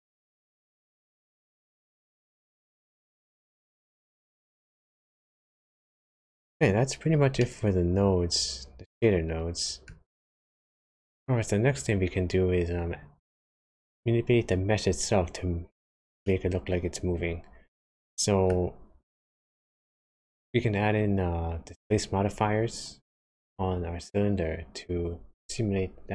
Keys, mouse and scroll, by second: 4.6 click, 6.8-7.4 scroll down 4, 7.4 middle click, 16.3 middle click.